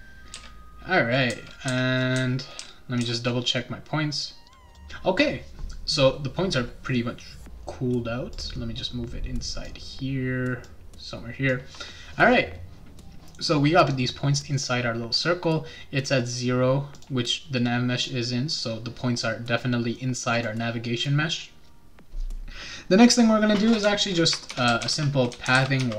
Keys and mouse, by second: 0.0-3.5 typing, 4.1 click, 4.5 click, 4.6 click, 8.3-9.6 drag, 10.6 click, 14.5 right click, 16.9 click, 20.3 click, 24.2-25.9 typing.